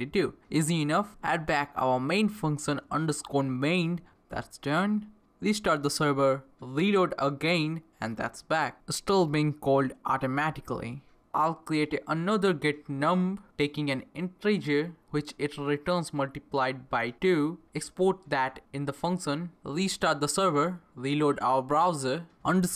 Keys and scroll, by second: 0.0-2.2 typing, 2.9 Left, 3.7-5.0 typing, 5.2 ctrl+c, 5.4 Up, 5.5 Return, 7.6 Return, 7.8 Return, 9.1-18.3 typing, 13.6 Return, 17.8 Left, 18.7 Left, 19.3-22.7 typing.